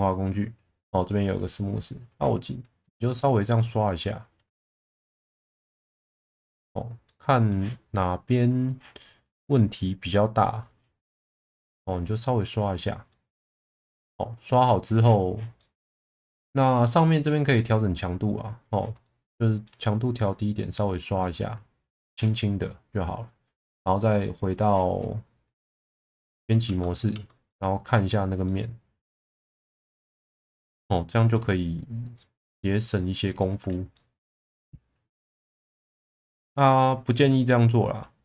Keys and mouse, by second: 2.8 click, 4.5 Tab, 5.0 middle click, 5.8 Tab, 6.2 middle click, 7.1 middle click, 8.6 click, 9.0 middle click, 11.0 middle click, 12.0 click, 13.1 middle click, 15.6 middle click, 17.6-18.7 drag, 19.0 middle click, 21.0 middle click, 23.8 click, 25.8 click, 26.6 Tab, 27.1 Tab, 27.5-28.0 middle drag, 28.4-29.5 middle drag, 29.9 middle drag, 30.4-31.3 middle drag, 31.5-33.2 middle drag, 33.4 middle click, 33.9-35.5 middle drag, 35.8-36.1 middle drag, 36.2 middle click, 36.8-38.2 middle drag.